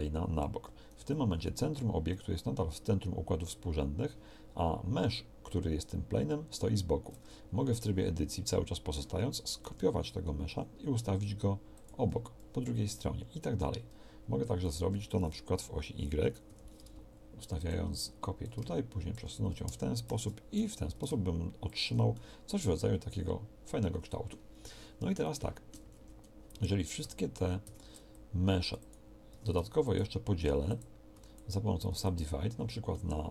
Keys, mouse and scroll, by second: 9.7 shift+d, 14.7 shift+d, 19.1-20.1 drag, 20.1 shift+d, 23.3-25.5 drag, 25.9 a, 26.0 a, 27.0 w, 27.7 w, 29.3 w, 30.5 w, 31.2 w, 31.9 w.